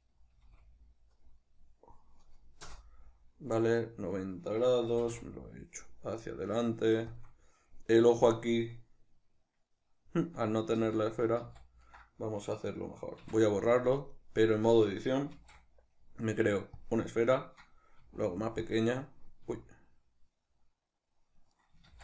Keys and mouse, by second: 2.7 Return, 3.0 middle click, 4.9 g, 7.2 shift+click, 7.3 middle click, 10.8 ctrl+z, 13.3 x, 15.4 shift+a, 18.0 s, 18.8 click, 19.5 s, 21.6 right click, 21.9 ctrl+z.